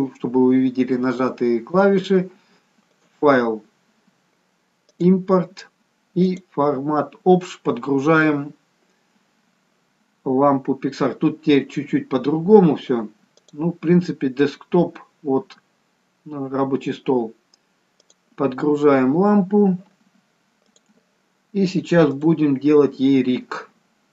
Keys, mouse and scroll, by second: 3.0 click.